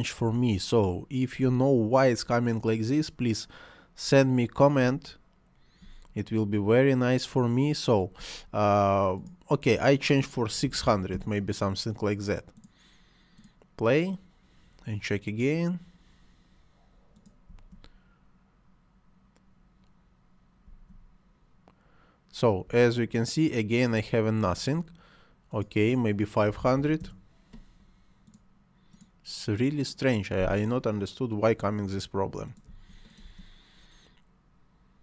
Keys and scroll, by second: 1.4 space, 4.8 space, 8.2 Escape, 10.6 6, 11.2 Return, 17.4 space, 20.6 space, 22.7 space, 24.3 Escape, 26.2-27.1 typing, 32.6 space.